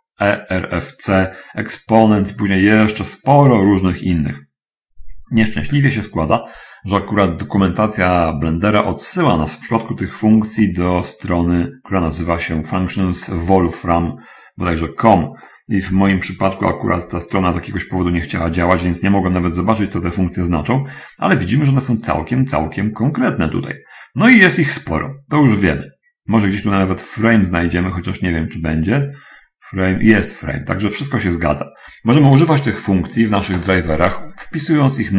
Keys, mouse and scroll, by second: 2.4-3.2 scroll up 1, 3.6-4.4 scroll up 1, 4.6-5.2 scroll up 1, 7.4 middle click, 8.2 middle click, 21.6 scroll up 1, 24.3 scroll up 1, 25.0-25.6 scroll up 1, 28.0-29.0 middle drag, 29.0 scroll down 2, 30.0 scroll up 1, 30.8-31.8 drag.